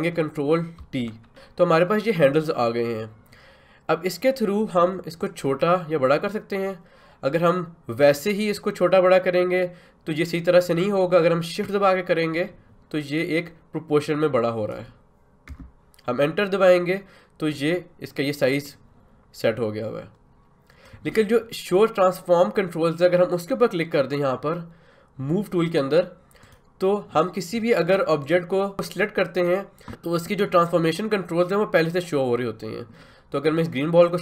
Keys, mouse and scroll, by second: 0.8 ctrl+t, 5.2-15.2 drag, 15.5 Return, 18.6-26.4 drag, 26.4 click.